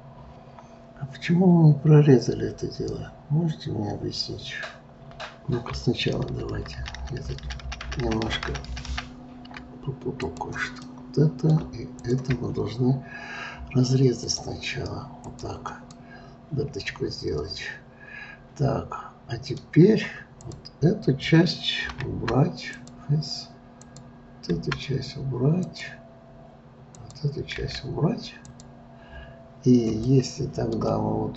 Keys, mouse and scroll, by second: 6.3 ctrl+z, 6.6 ctrl+z, 6.8 ctrl+z, 7.0 ctrl+z, 7.2 ctrl+z, 7.5 ctrl+z, 7.7 ctrl+z, 7.8 ctrl+z, 10.2 click, 10.9-12.0 middle drag, 12.0 shift+click, 14.2-15.9 drag, 15.9-18.9 middle drag, 20.3 click, 22.0 Delete, 23.7 click, 24.5 Delete, 27.0 click, 27.6 Delete, 30.0-31.3 middle drag.